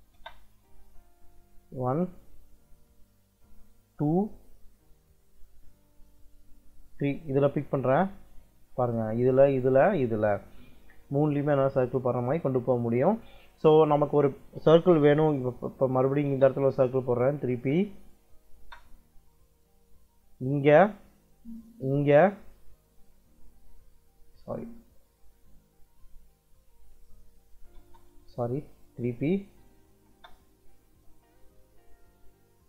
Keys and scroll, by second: 0.1 space, 15.9 c, 16.2 space, 17.5 3, 18.0 p, 18.5 space, 24.3 `, 26.6 Escape, 27.3 c, 27.7 space, 29.0 3, 29.6 p, 30.0 space.